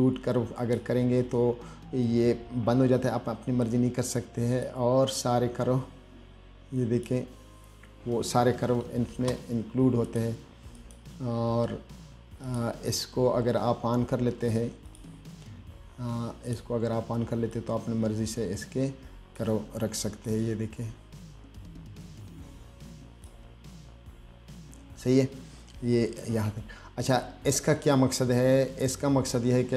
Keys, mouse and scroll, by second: 0.8 click, 4.9-7.3 drag, 10.3 click, 11.0 click, 12.7 click, 15.1 click, 16.7 click, 17.8-19.6 drag, 20.5-23.5 drag.